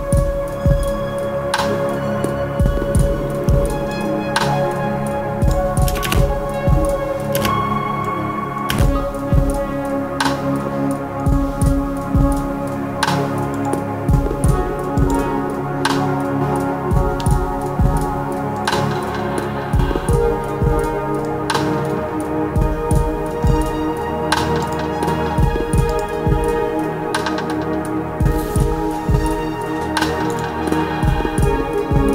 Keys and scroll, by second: 5.8 space, 7.3 space, 8.6 space.